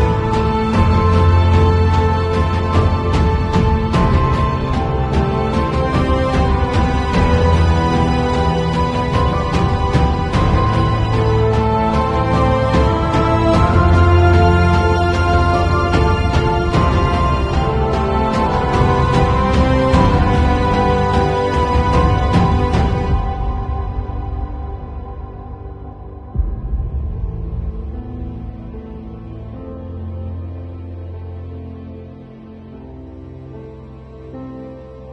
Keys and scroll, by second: 1.5 space, 4.7 space, 6.5 super+a, 7.2 shift+super+c, 7.5 shift+super+v, 8.1 super+v, 10.6 shift+super+a.